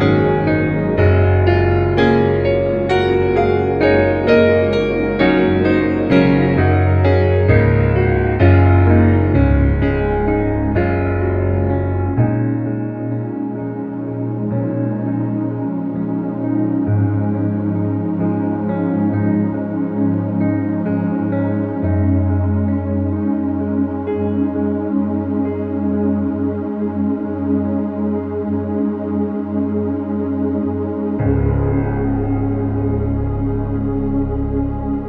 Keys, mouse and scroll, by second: 3.9 click, 5.8 right click, 6.4 click, 8.4-9.0 click, 9.7-10.1 click, 10.8-11.2 click, 14.2 space, 14.4 click, 14.5 space, 15.3 ctrl+-, 16.8 space, 17.5 click, 18.2 ctrl+click, 18.4 ctrl+e, 19.4 l, 19.9 ctrl+-, 20.3-23.9 drag, 26.6 shift+F6, 28.0 alt+t, 28.5 click, 29.6 alt+click, 29.9 alt+t, 30.4 click, 33.9 click.